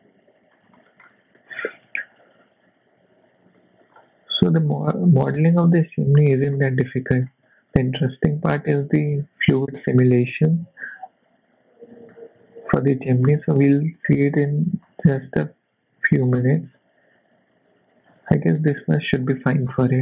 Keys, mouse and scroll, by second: 0.8 shift+middle click, 1.0 scroll up 2, 1.3 s, 3.6 shift+middle click, 3.9-4.3 scroll down 2, 4.5 e, 6.9 shift+middle click, 7.3 scroll up 1, 7.4 shift+middle click, 8.1 scroll up 1, 9.1 s, 12.1 shift+middle click, 12.9 e, 15.8 s, 18.2-18.7 scroll down 3, 18.8 shift+middle click, 19.2 scroll up 2, 19.5 shift+middle click, 19.7-20.0 scroll down 3.